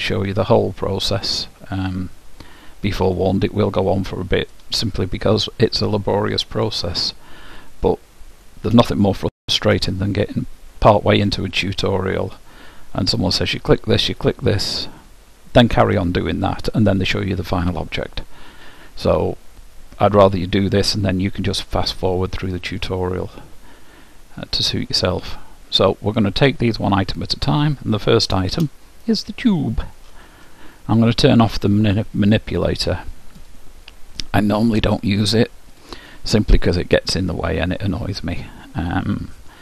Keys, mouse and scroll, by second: 3.4-5.1 drag, 5.7-7.3 middle drag, 8.1-9.0 scroll up 1, 9.0-13.7 middle drag, 13.8-16.2 middle drag, 18.1-21.1 middle drag, 22.3-24.1 middle drag, 26.6-28.4 middle drag, 28.5 shift+h, 33.3-35.3 drag, 35.7-37.7 middle drag.